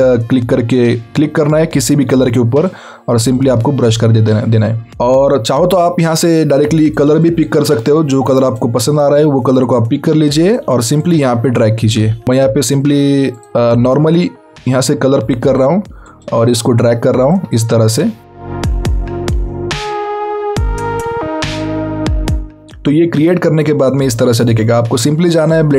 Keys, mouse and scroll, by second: 0.9 alt+click, 8.3 click, 10.5 alt+click, 12.2 click, 13.4 alt+click, 15.7 alt+click, 17.3 alt+click, 19.4 alt+click, 20.4 alt+click, 21.3 alt+click.